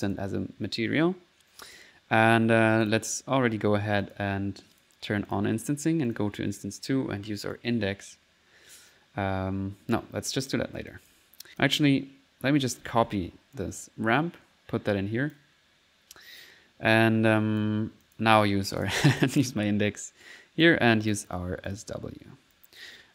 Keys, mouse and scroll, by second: 1.7 click, 2.9 click, 3.4 middle click, 4.0 click, 4.8 click, 5.3 click, 5.7 click, 5.9 click, 6.8 middle click, 7.6-10.7 drag, 10.7 middle click, 10.9 click, 12.9-13.7 typing, 14.2-15.5 drag, 17.3 click, 17.8 click, 18.1 click, 18.5-19.5 typing, 18.8 click, 20.0 click, 21.1 click, 22.2-23.0 typing, 22.6 click, 23.0 middle click.